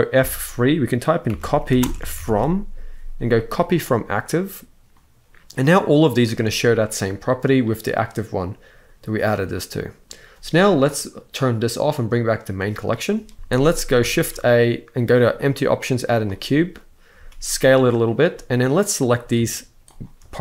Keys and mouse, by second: 0.0 F3, 4.7 middle click, 6.2-9.2 drag, 9.3-9.8 middle drag, 11.1 click, 12.1 click, 13.3 z, 13.3 x, 13.9 shift+a, 16.9 s, 18.1 middle click, 18.8 drag.